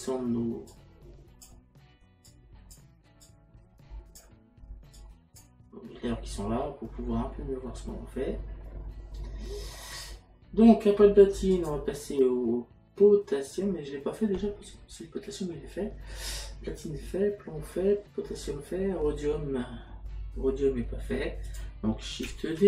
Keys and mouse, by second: 0.7 click, 2.3 click, 5.0 click, 11.5 click, 21.5 click.